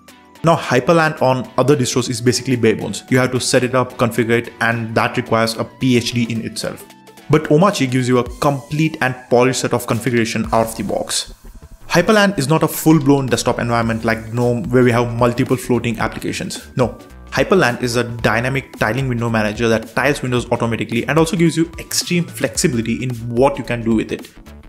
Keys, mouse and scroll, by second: 0.7 super+click, 3.9 click, 5.4 super+3, 6.0 click, 6.2 click, 8.4 click, 8.9 click, 10.5 click, 12.1 click, 14.2 click, 15.3 click.